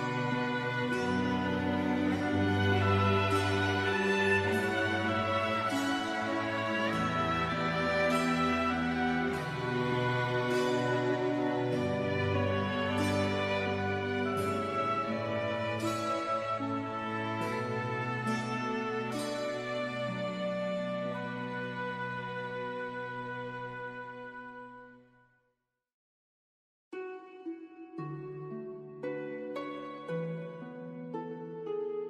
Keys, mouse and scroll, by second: 3.2 KP_4, 3.8 KP_Enter, 6.2 click, 7.0 KP_2, 7.3 KP_0, 7.3 KP_Enter, 8.4 click, 9.3 KP_5, 10.1 KP_Enter, 11.1 click, 27.6-28.3 scroll down 1.